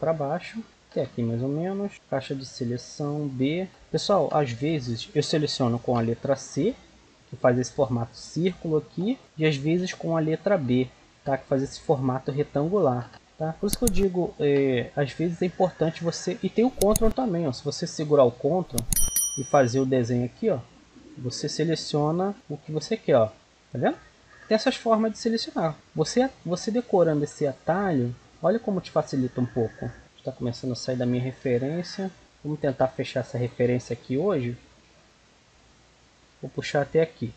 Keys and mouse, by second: 1.9 b, 2.1-3.7 drag, 4.4 a, 5.8 c, 9.2-10.8 right drag, 9.2 a, 9.8 b, 13.1 a, 17.2-18.9 drag, 24.5 a, 25.7-31.2 right drag, 29.0-30.0 drag, 30.3 click, 31.2 middle click, 31.3 right click, 32.2-34.2 right drag, 34.2 middle click, 35.0 e.